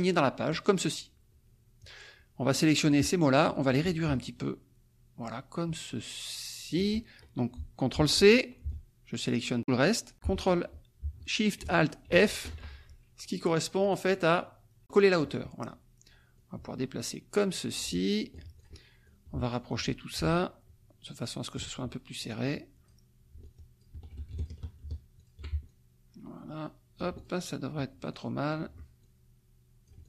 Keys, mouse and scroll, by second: 0.5 click, 2.8 click, 4.1-6.9 ctrl+shift+drag, 7.9 ctrl+c, 8.6-9.9 ctrl+shift+drag, 10.1 ctrl+z, 12.1 ctrl+alt+shift+f, 13.8 click, 15.3 click, 16.4-18.8 drag, 19.1 ctrl+click, 20.1-21.7 ctrl+drag, 22.2 click, 23.8 ctrl+click, 24.4 ctrl+shift+click, 25.1 shift+click, 25.7-27.4 ctrl+shift+drag, 28.1 click, 29.0-30.0 ctrl+drag.